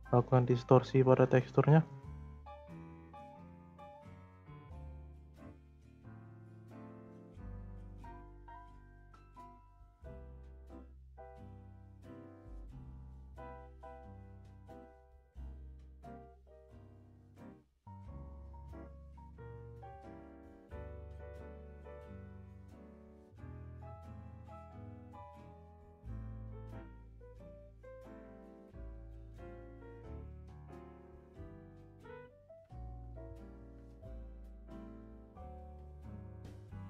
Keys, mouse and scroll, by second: 0.2-3.3 drag, 5.9-8.6 scroll down 2, 8.6 click, 9.1-11.6 drag, 11.6 scroll up 3, 12.5-13.7 drag, 13.7 scroll up 2, 14.2-15.2 scroll down 4, 15.2 click, 17.1-20.1 drag, 20.8-25.6 drag, 26.4-28.6 middle drag, 28.6-29.2 scroll down 2, 29.2 scroll down 1, 29.4 click, 31.0 click, 31.6-32.4 scroll up 5, 32.4 click, 33.3 0, 35.3-36.8 drag.